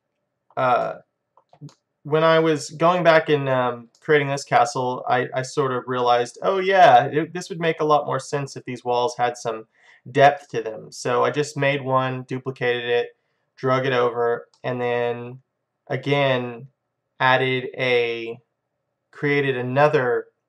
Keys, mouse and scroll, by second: 10.6-12.3 middle drag, 14.6-16.4 middle drag.